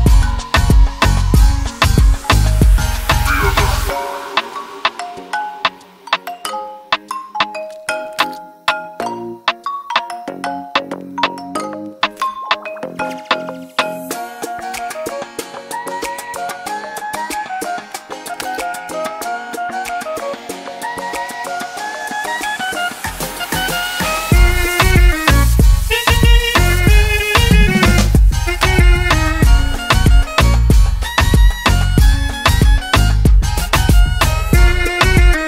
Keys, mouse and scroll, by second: 4.0 click, 6.0 click, 6.2 click, 7.3 double click, 8.0 click, 9.9 click, 10.5-12.4 typing, 13.3 click, 13.8 Return, 15.8 click, 17.3 click, 21.7 click, 23.5-23.8 typing, 24.1 Return, 26.0 click, 26.8 click, 27.3 double click, 28.4 click, 28.6 double click, 30.0 click, 31.9 BackSpace, 33.4 typing, 34.5 Return.